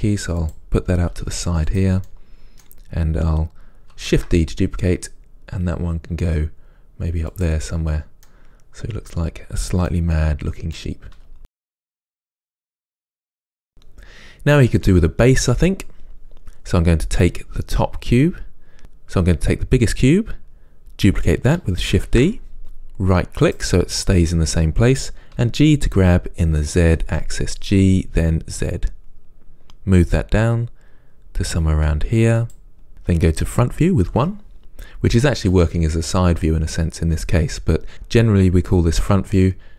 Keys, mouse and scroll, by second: 0.7 click, 1.3 s, 1.9 click, 2.2-7.9 middle drag, 4.3 shift+d, 7.9 scroll down 1, 8.4-17.3 middle drag, 11.3 g, 12.8 scroll down 2, 17.3 click, 22.2 shift+d, 25.6 g, 34.2 KP_1, 34.6-35.9 scroll down 1.